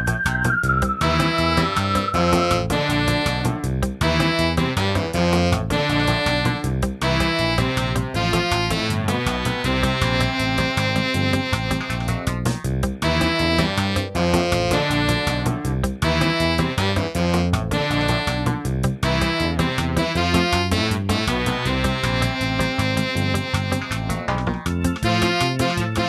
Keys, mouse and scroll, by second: 0.0 shift+middle click, 0.2-0.9 scroll up 4, 1.0 middle click, 1.9 shift+middle click, 2.4 scroll up 2, 4.1 n, 4.5 n, 5.2 click, 6.0 g, 8.0 g, 10.3 click, 10.7 click, 13.3 click, 16.2 g, 17.5 middle click, 20.2-20.9 scroll down 4, 20.9 scroll up 2, 21.3 middle click, 22.2 g, 23.0 shift+middle click, 23.6 middle click.